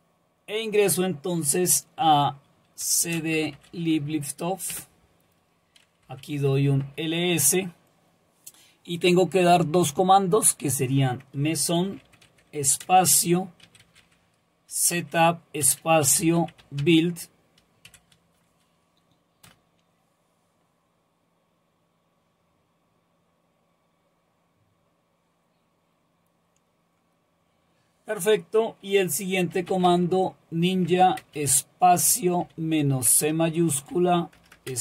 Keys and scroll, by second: 2.6-4.0 typing, 4.7 Return, 5.8-6.8 typing, 11.6-14.5 typing, 15.9-17.9 typing, 19.5 Return, 29.3-34.8 typing.